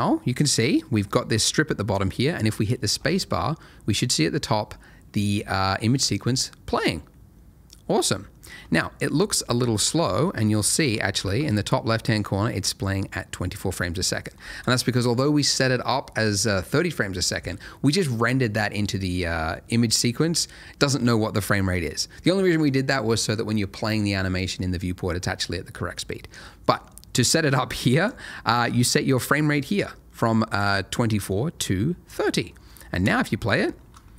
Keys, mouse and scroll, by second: 2.9 space, 9.4 space, 10.0 space, 11.1 shift+Left, 14.4 space, 27.7 click, 28.3 middle click, 30.5 click, 32.4 middle click, 33.0 space.